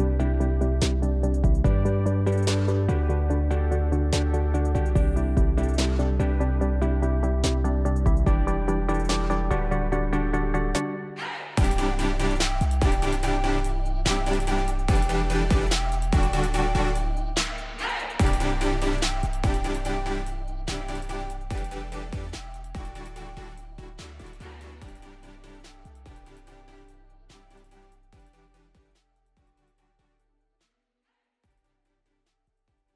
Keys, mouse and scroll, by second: 0.4 click, 1.9 click, 2.5 click, 3.0 click, 3.2 scroll, 3.4 click, 5.0 click, 5.8 click, 7.7 click, 8.3-9.5 typing, 10.5 click, 10.7 click, 12.3 click, 13.8-17.8 typing, 18.8-20.1 typing, 25.5 space, 25.7 space, 30.1-32.4 typing.